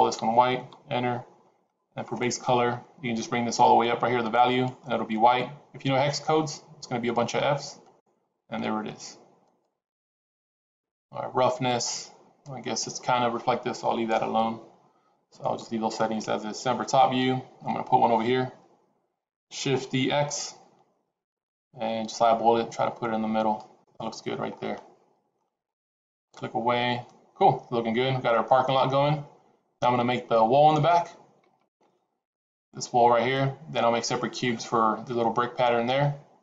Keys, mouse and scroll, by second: 2.0 click, 15.0 scroll down 2, 15.3 middle click, 16.5 KP_7, 19.8 shift+d, 24.2 scroll down 4, 24.5 middle click, 25.4-25.7 scroll up 2, 26.1 click, 27.0 middle click.